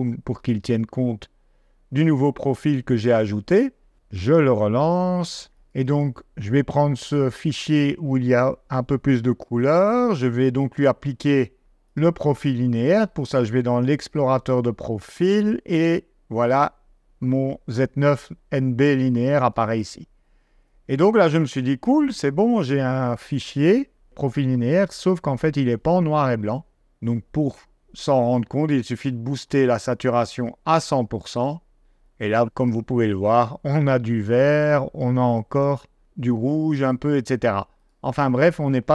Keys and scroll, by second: 9.4 d.